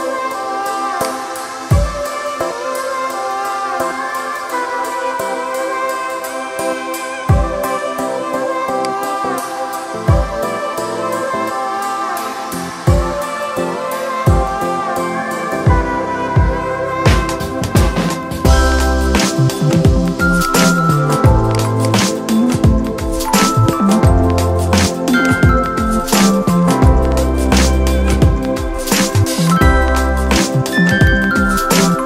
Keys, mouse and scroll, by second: 0.8-8.6 alt+drag, 17.7 ctrl+z, 20.2 click, 21.6 right click, 23.3-32.0 drag.